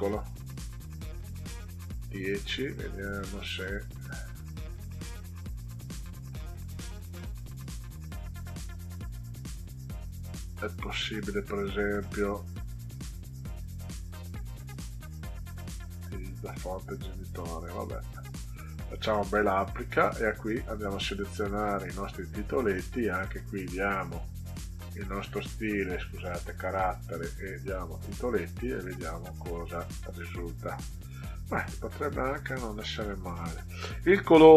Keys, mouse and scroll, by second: 2.5-5.7 drag, 7.4 click, 10.8 click, 12.0 click, 15.4 click, 18.9 click, 20.4-22.3 drag, 24.1 click, 25.7 click, 26.7 click, 28.1 click, 29.4 click.